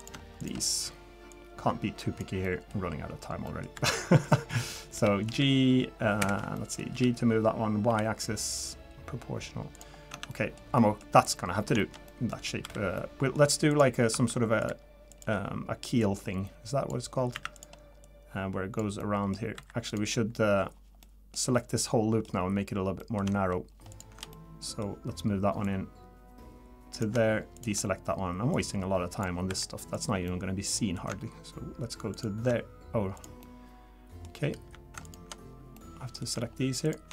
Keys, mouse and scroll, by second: 0.0 click, 0.4 shift+click, 1.3 click, 2.4 middle click, 3.5 middle click, 3.7 2, 4.2 click, 4.5 middle click, 4.9 g, 6.5 middle click, 6.9 g, 9.9 scroll down 3, 10.1 Tab, 10.3 middle click, 10.8 middle click, 11.2 middle click, 11.5 scroll up 2, 11.8 shift+middle click, 12.1 middle click, 12.6 3, 13.0 middle click, 13.7 click, 14.1 Tab, 14.6 click, 14.6 2, 15.1 click, 16.0 click, 17.3 1, 17.5 click, 18.0 click, 19.0 middle click, 19.6 2, 19.9 click, 21.0 middle click, 21.6 middle click, 22.3-22.9 scroll down 2, 23.0 middle click, 23.9 ctrl+shift+click, 24.3 middle click, 25.6 click, 27.5 shift+click, 28.5 click, 29.5 3, 29.9 click, 30.3 middle click, 32.1 ctrl+shift+click, 33.1 click, 33.4 middle click, 34.3 scroll up 3, 35.0 ctrl+shift+click, 35.4-35.7 scroll down 3, 35.7 middle click, 36.8 ctrl+shift+click.